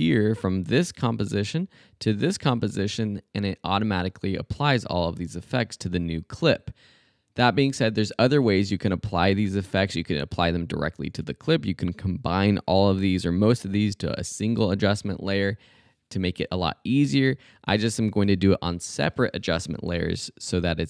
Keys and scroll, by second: 0.8 super+c, 1.9 super+v, 18.1 BackSpace.